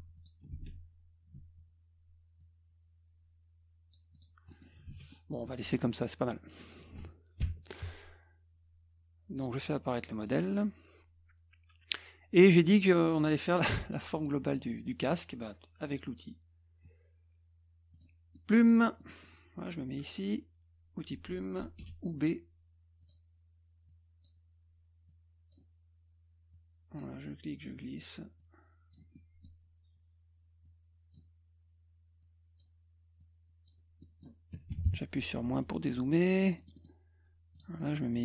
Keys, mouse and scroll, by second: 0.2 click, 0.4 F1, 2.4 shift+click, 4.2 click, 4.5 middle click, 4.9 ctrl+z, 5.1 middle drag, 7.4 ctrl+shift+l, 9.4 click, 9.9 click, 10.3 middle click, 12.5 middle drag, 13.3 middle click, 13.8 middle click, 14.1 middle click, 14.5 middle click, 17.9 click, 18.4 middle click, 18.4 scroll, 18.6 middle click, 19.0 middle click, 23.0 click, 23.9 click, 25.1 click, 26.5 click, 28.4 click, 29.2 middle click, 30.7 click, 32.2 click, 33.2 click, 34.0 middle click, 35.6 middle click, 36.6 middle click, 36.8 middle click, 37.6 click, 37.8 middle click, 37.9 middle click.